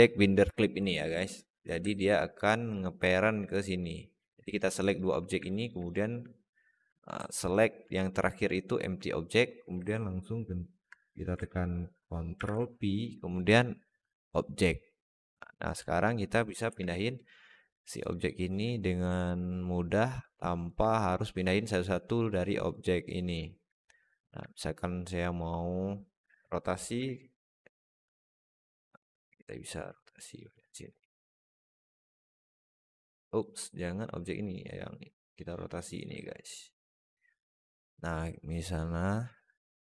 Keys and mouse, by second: 0.8 alt+middle drag, 1.8 alt+middle click, 5.3 alt+middle drag, 7.1 alt+middle drag, 7.4 alt+shift+middle drag, 8.5 shift+click, 12.2 ctrl+p, 15.3 click, 16.5 g, 19.1-19.8 alt+middle drag, 20.1-20.5 alt+middle drag, 22.0 click, 22.6 click, 23.3 alt+middle drag, 23.8 click, 24.3-25.2 alt+middle drag, 26.0 r, 30.5 middle drag, 31.2 click, 32.1 click, 32.5 click, 35.0 click, 36.1-37.4 middle drag.